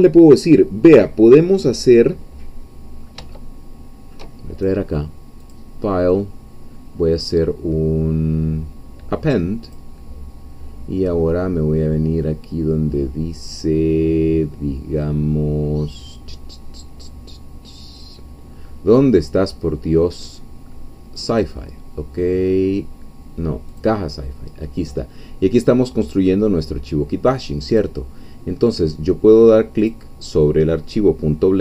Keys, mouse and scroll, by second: 3.3-4.7 shift+middle drag, 5.4 click, 9.7 click, 21.2 click, 23.7 click, 27.7 click, 29.8 click.